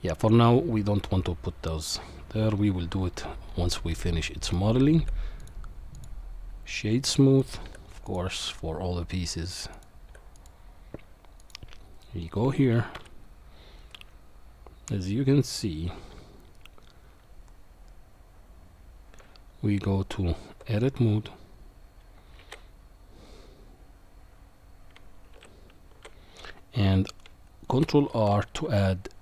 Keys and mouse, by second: 4.2 middle click, 5.0 q, 7.4 click, 7.6 q, 10.1 q, 11.4 click, 12.9 KP_1, 19.2 Tab, 22.5 shift+r, 25.3 ctrl+z, 27.7 ctrl+r.